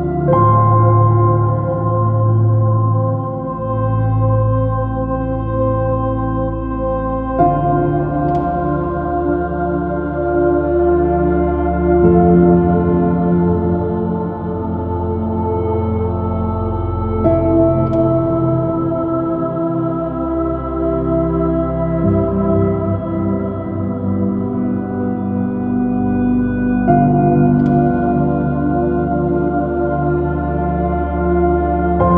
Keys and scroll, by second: 2.0 super+i, 2.3 space, 4.1 j, 4.9 b, 17.7 super+z, 20.3 super++, 20.5 space, 23.0 space, 23.9 b, 24.1 super++, 24.3 super+space.